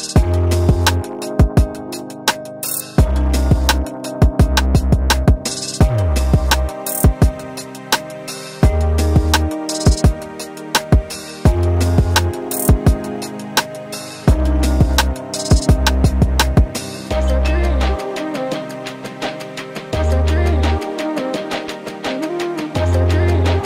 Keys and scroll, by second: 0.6 ctrl+a, 1.7 ctrl+t, 8.6 BackSpace, 10.3 space, 11.3 ctrl+a, 15.4 BackSpace, 16.8 ctrl+a, 20.6 Down.